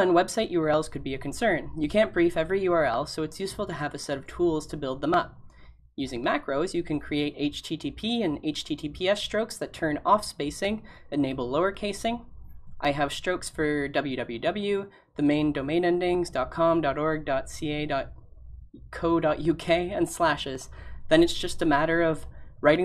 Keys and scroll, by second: 21.1 typing.